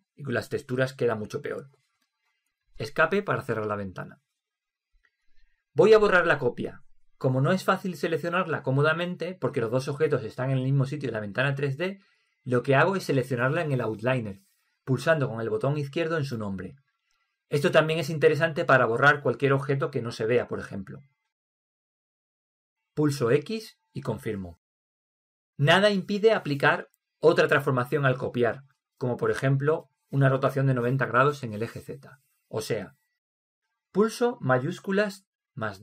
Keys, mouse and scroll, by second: 8.9-14.6 right drag, 16.6 click, 23.9 x, 34.8-35.8 right drag.